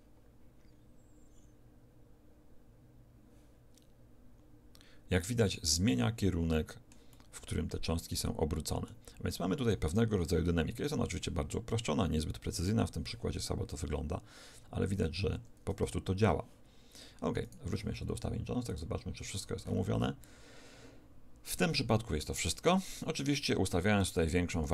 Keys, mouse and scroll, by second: 6.5-8.8 middle drag, 15.3 Escape, 15.9-17.3 middle drag, 17.3-20.2 right drag, 18.6 click, 24.1 click.